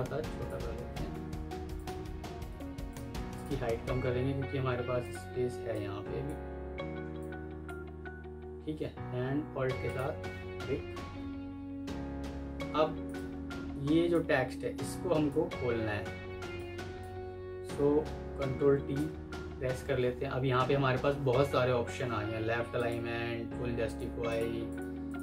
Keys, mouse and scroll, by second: 1.4 Escape, 3.2 double click, 4.6 Escape, 9.7 alt+click, 10.9 F3, 11.6 F3, 16.0 F2, 18.7 ctrl+t, 24.1 double click.